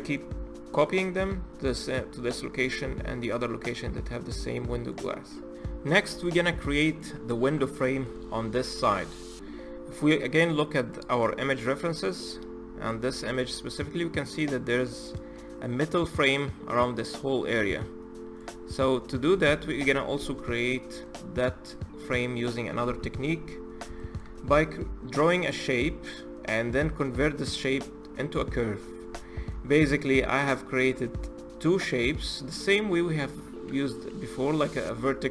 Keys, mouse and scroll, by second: 3.4-5.3 middle drag, 6.2-8.0 middle drag, 8.0-8.4 scroll up 3, 8.4-11.6 middle drag, 18.7-19.2 middle drag, 19.2-19.9 scroll down 1, 19.9 z, 20.8-21.5 middle drag, 21.5 scroll up 1, 21.7 click, 22.1-22.6 scroll down 2, 22.6 h, 22.9-23.8 scroll up 3, 23.8-24.2 shift+middle drag, 24.2-25.2 scroll up 1, 25.2 click, 26.2-27.8 scroll down 3, 27.8-29.0 scroll up 7, 29.0-29.4 shift+middle drag, 29.4-30.5 scroll up 5, 30.5 click.